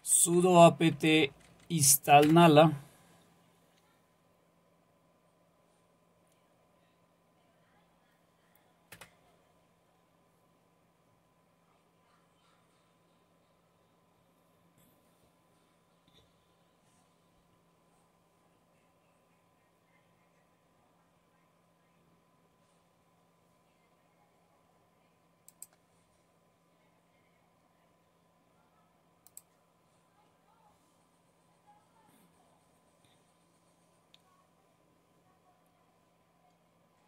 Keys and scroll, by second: 0.2 Right, 0.4 Right, 0.9 Delete, 1.1 Delete, 1.3 Delete, 1.5 Delete, 2.2 Return, 8.9 Return.